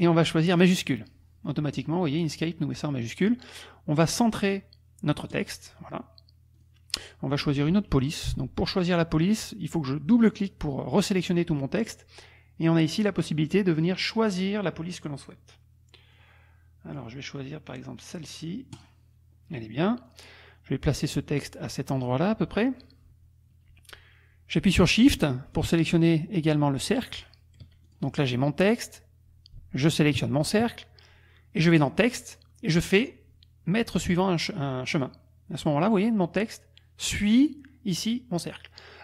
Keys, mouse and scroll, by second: 0.5 click, 5.3 click, 6.6 click, 10.1 click, 13.7 click, 16.1 click, 18.7 click, 20.1 click, 21.0-22.8 drag, 25.6 shift+click, 27.9 shift+click, 28.6 click, 30.2 shift+click, 31.9 click, 35.0 click, 35.9 click, 38.1 click.